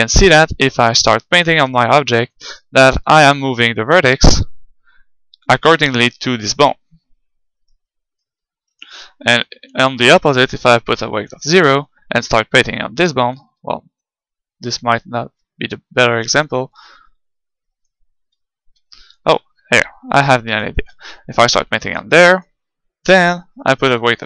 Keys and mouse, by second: 0.9-2.8 drag, 5.0 g, 7.8-9.5 right drag, 8.9 ctrl+z, 10.0 click, 12.0-13.9 drag, 13.5 ctrl+z, 16.4-18.3 drag, 18.2 ctrl+z, 18.6 ctrl+z, 20.2-22.6 drag, 23.6-24.2 drag.